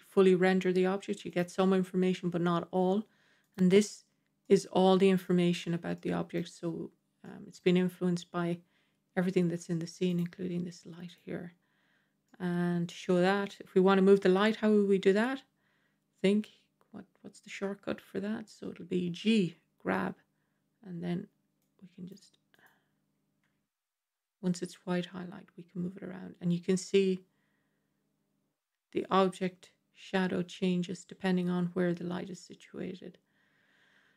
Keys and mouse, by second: 1.2 click, 3.3 click, 4.3-5.1 middle drag, 4.3 typing, 5.8-6.3 middle drag, 7.1-7.5 middle drag, 12.1-12.8 middle drag, 19.0 g, 22.0 click, 23.3 g.